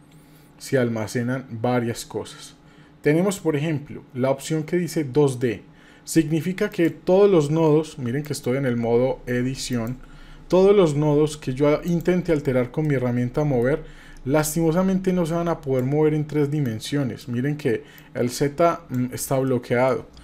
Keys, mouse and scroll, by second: 0.8-1.3 scroll down 1, 1.3 scroll up 1, 6.7 click, 8.2-9.9 drag, 11.9 click, 12.8 middle click, 14.4-15.8 drag, 16.6 click, 18.0-19.0 drag, 19.4 middle click.